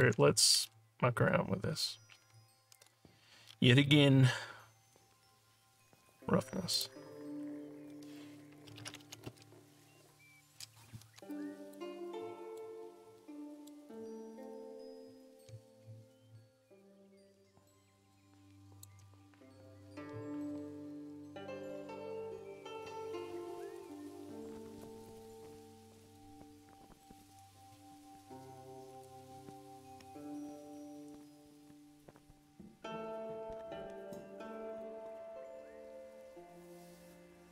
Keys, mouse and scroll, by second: 0.7-1.3 scroll down 3, 6.7 click, 11.3 alt+click, 12.1 alt+middle click, 12.9 scroll down 2, 13.2 alt+middle click, 13.9-18.8 alt+drag, 26.0 click, 34.7 click.